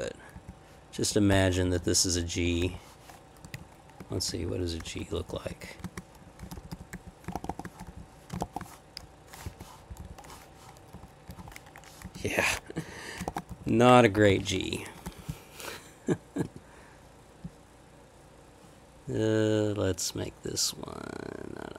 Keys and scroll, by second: 0.3 Down, 1.1 Right, 1.7 Up, 1.8 Left, 2.3 Left, 2.7 \, 3.5 Left, 4.0 Down, 4.9 Up, 5.0 Right, 5.5 Up, 6.4 Up, 6.4 Down, 6.5 Left, 6.9 Up, 7.3 shift+-, 7.8 Down, 8.3 space, 8.4 -, 9.4 \, 9.9 Up, 10.0 Left, 10.9 Right, 11.3 Down, 12.0 Up, 12.1 Left, 12.9 Left, 13.3 shift+-, 13.6 shift+Right, 14.2 Escape, 14.3 k, 15.1 Left.